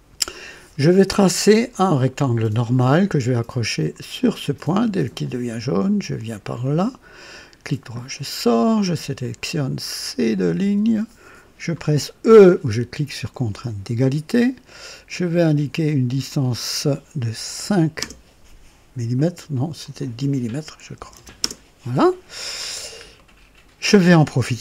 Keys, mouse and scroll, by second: 1.7 click, 2.6 click, 5.2 click, 6.6 click, 7.7 right click, 9.2 click, 10.4 click, 13.5 e, 15.1 click, 16.3 click, 17.6 KP_5, 18.0 KP_Enter, 19.8 click, 21.0-21.6 typing, 21.4 KP_Enter, 22.6-22.9 scroll down 1, 23.2 right click, 23.3-24.5 typing.